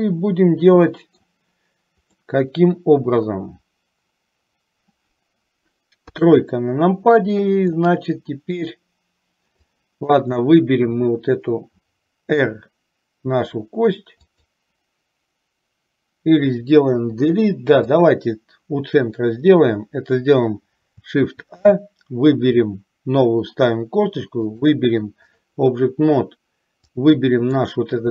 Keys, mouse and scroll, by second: 2.3-3.5 middle drag, 6.2 KP_3, 7.8-8.8 shift+middle drag, 9.8 click, 12.5 r, 17.2 Delete, 21.4 shift+a, 24.7 click, 26.9 click.